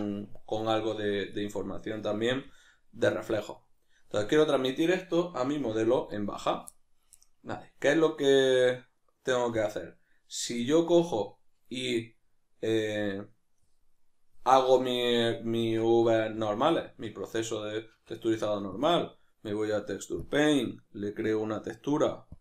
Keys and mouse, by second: 5.5 alt+h, 6.1 right click, 6.7-20.2 middle drag, 20.2-22.4 drag.